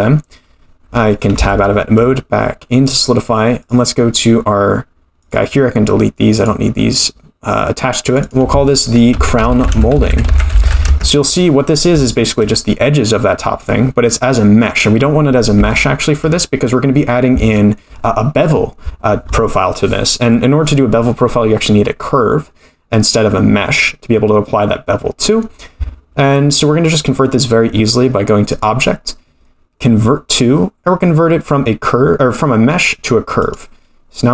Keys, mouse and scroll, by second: 1.4 Tab, 2.9 click, 3.6 click, 5.2 click, 6.4-7.1 drag, 8.1 click, 10.9 click, 12.0-12.3 shift+middle drag, 12.5-13.6 middle drag, 15.7-16.1 shift+middle drag, 28.5-34.2 drag.